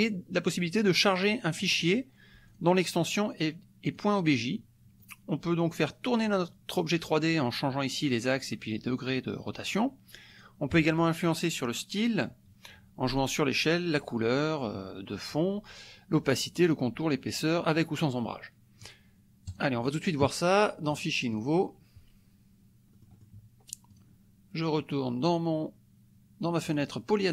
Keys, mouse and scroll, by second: 2.5 click, 4.0 click, 5.0 click, 10.3 click, 19.6 click, 20.9 click, 21.4 click, 22.9 middle click, 24.0 click, 26.8 click.